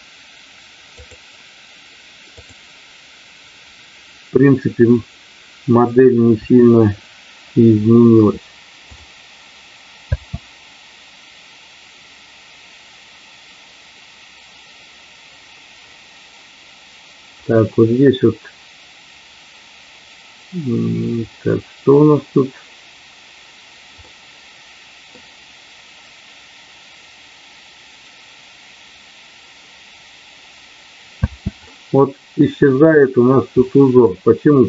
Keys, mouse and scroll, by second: 0.9 click, 5.7 click, 6.3 KP_1, 9.9 space, 24.0-25.1 middle drag, 31.2 space, 31.6 middle click, 33.6 middle click.